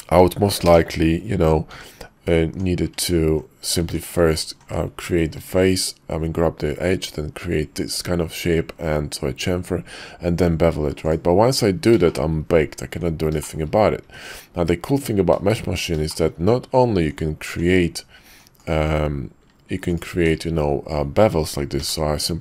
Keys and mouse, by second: 0.6 ctrl+KP_Add, 1.7 f, 2.4 Tab, 2.9 alt+click, 3.7 Tab, 4.2 alt+click, 5.3 ctrl+b, 12.1 shift+middle click, 12.9 Tab, 13.4 shift+middle click, 14.0 Tab, 15.4 shift+middle click, 16.1 shift+middle click, 16.9 Tab, 17.5 Tab, 18.2 Tab, 18.7 Tab, 19.9 alt+click, 21.7 y.